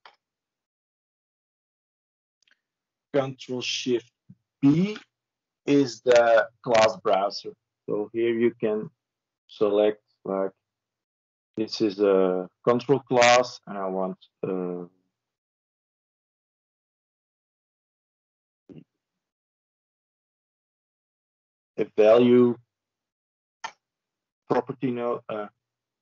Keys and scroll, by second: 4.3 ctrl+shift+b.